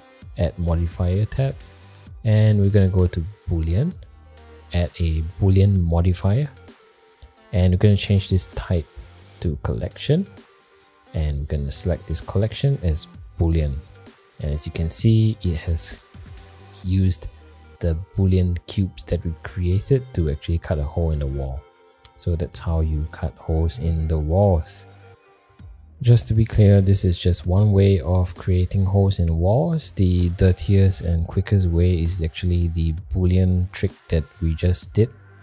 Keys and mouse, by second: 0.3-4.1 drag, 8.5-9.9 drag, 11.3-13.3 drag, 15.2 middle drag, 15.8 shift+middle click, 22.0 middle drag, 23.0 middle drag, 23.5 shift+middle click, 24.3-24.6 middle drag, 24.9 shift+middle drag, 29.5 middle click, 30.4 middle click, 31.3 middle click, 32.3 middle click, 33.1 click.